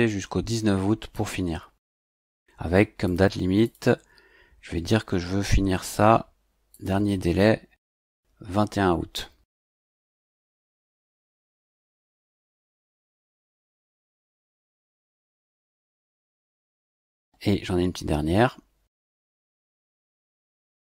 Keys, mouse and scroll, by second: 1.1 click, 3.0 click, 3.6 click, 6.7 click, 9.5 click, 12.1 click, 13.1-15.1 typing, 16.0 click, 19.4 click.